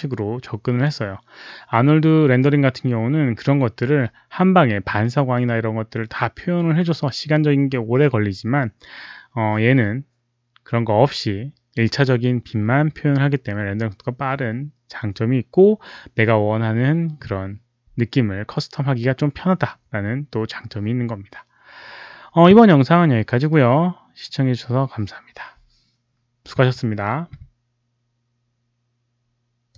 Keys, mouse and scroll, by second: 29.6 click.